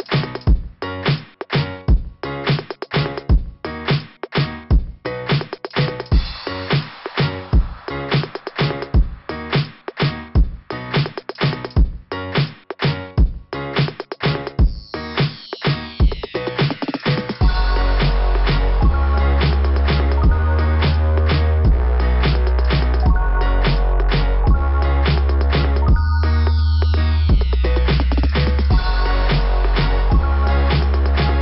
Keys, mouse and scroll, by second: 0.3 click, 4.6 click, 4.7 click, 5.8 click, 5.9 click, 7.1 click, 8.8 click, 8.9 click, 10.2 click, 10.3 click, 11.2 click, 11.3 click, 12.5 click, 12.8 click, 14.3 click, 14.9 click, 15.0 click, 16.2 click, 17.1 click, 17.2 click, 17.4 click, 18.5 click, 18.6 click, 20.6 scroll up 1, 23.2 scroll down 2, 27.1 click, 27.3 click, 27.6 click, 29.4 click, 29.4 click, 29.7 click, 29.7 click, 29.9 click, 30.0 click, 30.2 click, 30.2 click.